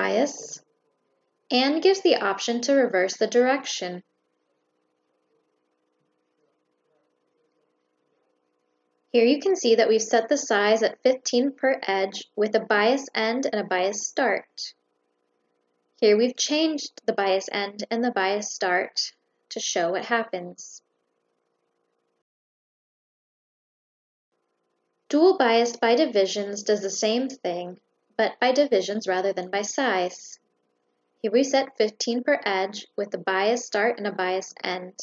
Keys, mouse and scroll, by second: 1.4 click, 4.1 click, 6.8 click, 7.9 click, 12.8 click, 15.3 click, 22.0 click, 23.2 click, 24.2 click, 27.5 click, 28.4 click, 34.1 click.